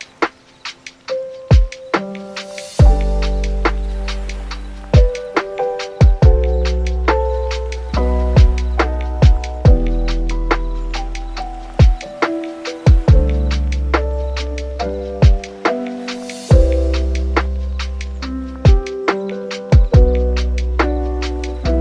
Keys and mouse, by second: 0.8 click, 17.7 click, 18.1 click, 18.9 click, 19.2 click, 20.5 click, 20.8 click, 21.1 n, 21.4 n, 21.6-21.8 middle drag.